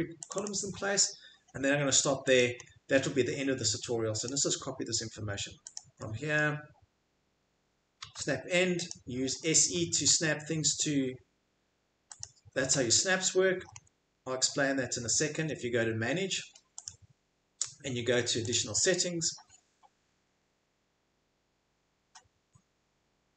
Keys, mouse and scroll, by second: 1.9 Escape, 4.2 click, 5.7 click, 7.8-8.6 typing, 8.9 click, 9.4 middle click, 10.0 middle click, 10.2 middle click, 10.3 middle click, 12.2 click, 12.8 middle click, 13.8 middle click, 15.3 Escape, 15.3 scroll, 16.8 click, 16.8-17.2 scroll, 18.5 click.